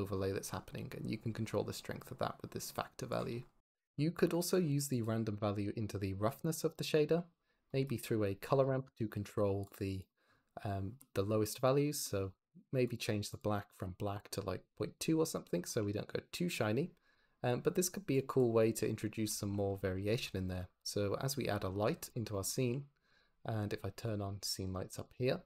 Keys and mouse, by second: 4.3 click, 4.6 shift+d, 5.2 click, 9.8 click, 12.8-14.2 drag, 14.2 ctrl+middle click, 15.5 shift+middle drag, 17.1 click, 18.0 drag, 20.0 shift+a, 22.5 g, 24.1-25.1 drag.